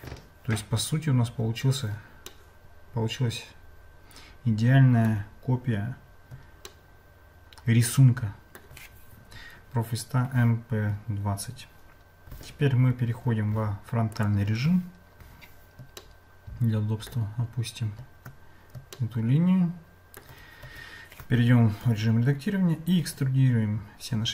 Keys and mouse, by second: 2.3-5.1 shift+middle drag, 6.8-8.6 shift+middle drag, 16.0-17.1 shift+middle drag, 19.0-20.2 shift+middle drag, 20.6 Tab, 21.8 a, 23.0 e.